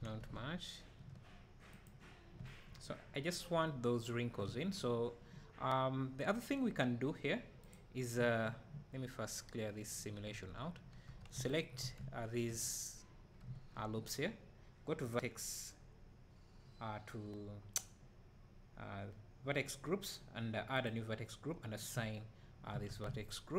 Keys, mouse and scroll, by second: 0.3 `, 1.8 click, 9.3-11.5 right drag, 10.3 Tab, 10.5-11.0 scroll up 2, 11.0 3, 11.5 alt+click, 12.6 scroll down 1, 13.4 `, 20.9-22.7 drag, 22.8 Tab, 23.1 `.